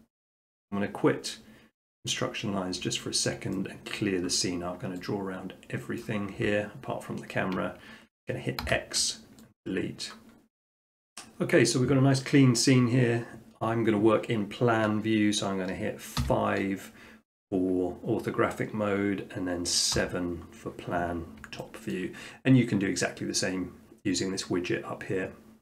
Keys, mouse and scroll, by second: 2.1 click, 2.4 middle click, 2.6 middle click, 3.3 shift+middle click, 4.4-5.1 middle drag, 6.0-7.1 drag, 8.6 x, 9.6-10.6 drag, 16.2 5, 20.0 7, 20.7-21.2 scroll, 21.9 shift+middle click.